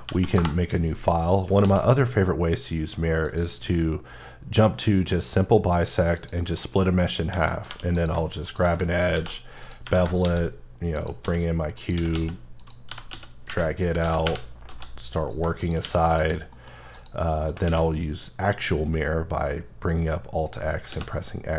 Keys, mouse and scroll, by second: 0.4 Return, 1.2 middle click, 1.6 x, 3.2 click, 4.9 click, 6.6 middle click, 7.7 2, 7.9 click, 9.1 ctrl+b, 9.6 click, 10.9 click, 11.2-14.7 typing, 11.8 click, 12.6 click, 15.2 click, 15.8 q, 15.9 q, 16.2 click, 16.5 middle click, 16.9 click, 17.3 middle click, 17.5 alt+scroll down 1, 17.7 alt+x, 20.9 x.